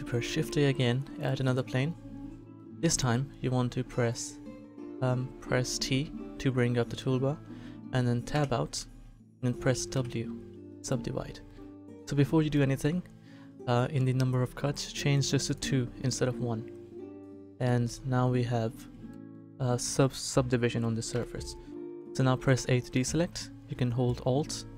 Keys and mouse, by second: 0.2 shift+a, 5.9 t, 9.1 Tab, 9.9 w, 15.4-17.2 drag, 17.6-19.9 middle drag, 22.5 a.